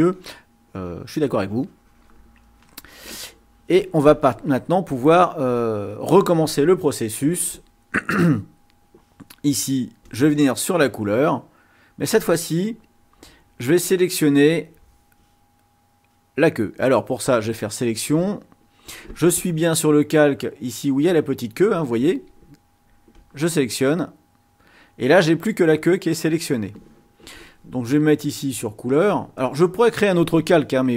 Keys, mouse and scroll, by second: 1.2 click, 10.0 click, 12.2 click, 13.6 click, 17.2 click, 23.3 click, 29.1 click.